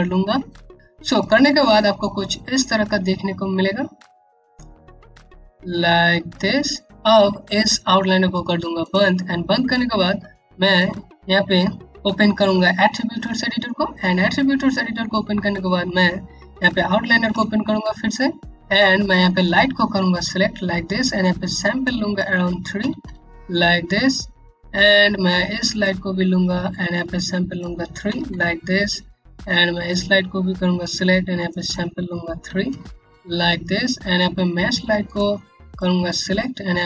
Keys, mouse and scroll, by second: 0.0 click, 1.3 click, 8.3 click, 8.8-9.1 scroll down 1, 9.2 click, 9.5 Home, 11.7 scroll up 1, 12.3 scroll up 1, 12.7 a, 16.3 alt+Num_Lock, 16.8 o, 19.0 click, 21.6 Home, 22.3 KP_3, 22.6 KP_Enter, 25.2 KP_Enter, 26.7 click, 27.6 KP_3, 27.8 KP_Enter, 29.4 click, 32.0 KP_3, 32.2 KP_Enter, 34.6 click.